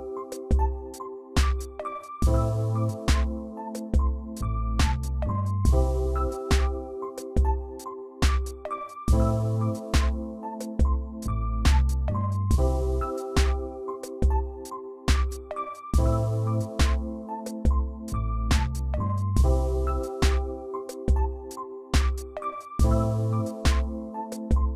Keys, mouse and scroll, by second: 1.1 Left, 1.3 Left, 1.5 Left, 1.8 Left, 2.4-3.1 Right, 3.3 Right, 3.7 Right, 3.9 Right, 5.2 Right, 5.4 Right, 5.8 Right, 6.4 click, 7.6-8.8 right click, 8.1 right click, 9.1 right click, 9.3 Left, 11.5 Left, 12.5 click, 12.7 click, 12.9 click, 13.1 click, 13.3 click, 13.5 click, 16.4 scroll down 1, 16.8-18.0 scroll up 3, 18.0 scroll up 2, 18.2 shift+click, 19.4 ctrl+g, 20.8 ctrl+j, 21.7 ctrl+click.